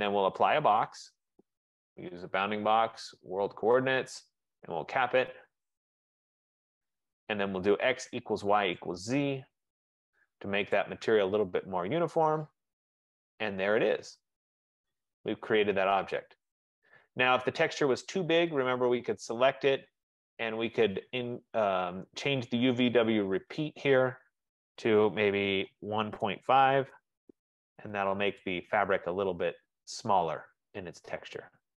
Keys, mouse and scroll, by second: 0.5 click, 2.4 click, 3.5 click, 4.8 click, 9.0 click, 10.8 click, 11.7 middle click, 12.0 middle click, 12.5 middle click, 17.4 F15, 17.4 right click, 17.5 middle click, 18.9 click, 23.2 click, 24.2 click, 25.8-26.7 typing, 26.9 Tab, 28.5 click, 29.0 middle click, 29.3 middle click, 29.4 middle click, 31.1 middle click, 31.5 scroll down 2.